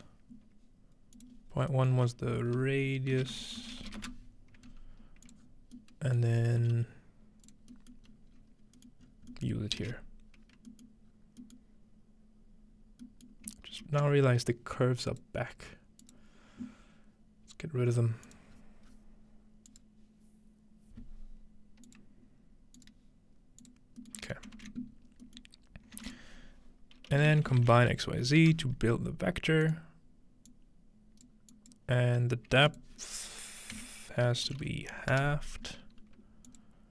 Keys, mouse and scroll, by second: 1.1 click, 1.6 scroll up 2, 2.5 F2, 2.8-3.5 scroll up 1, 3.1-4.5 typing, 5.3-7.1 drag, 5.4 scroll down 1, 6.4 scroll down 1, 6.6 g, 7.1 scroll down 1, 7.5-8.7 drag, 7.7 scroll down 1, 7.8-8.2 scroll up 2, 8.3 scroll down 1, 8.4-9.3 scroll up 7, 9.8 shift+a, 10.5-11.1 scroll up 1, 11.1-13.0 scroll down 1, 13.7 ctrl+s, 15.1 click, 16.0 click, 18.2 click, 18.5-19.0 scroll down 1, 19.7 click, 21.9-22.3 drag, 22.8 click, 23.6 click, 24.2 click, 24.2-26.1 middle drag, 24.6 ctrl+s, 24.9-26.1 scroll up 1, 26.0 shift+a, 26.1-27.6 shift+drag, 27.1-28.7 typing, 29.6-32.7 drag, 32.6 typing, 32.8-34.5 shift+drag, 33.7-35.1 typing, 36.5-36.9 drag.